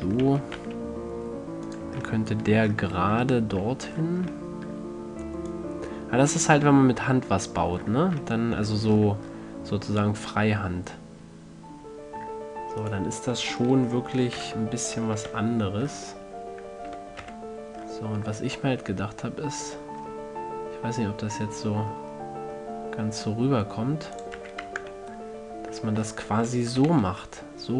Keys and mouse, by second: 0.0-1.9 drag, 0.3 e, 2.1-3.7 drag, 3.7-4.7 middle drag, 5.8 click, 8.1-13.1 middle drag, 14.7 alt+o, 15.6 g, 24.5-25.1 drag, 24.7 a, 25.0 Tab, 25.2-26.1 middle drag, 26.3 middle click, 27.1 z.